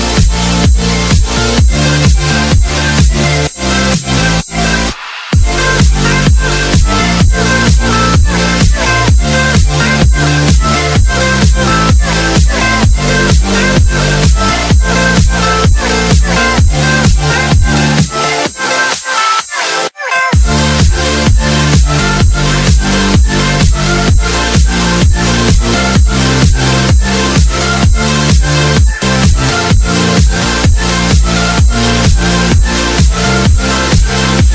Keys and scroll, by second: 6.6 space, 7.1 alt+c, 8.9 shift+F2, 19.1 shift+F2, 19.7 space, 20.5 Escape, 23.6 F3, 28.3 space, 28.6 Escape, 34.4 alt+c.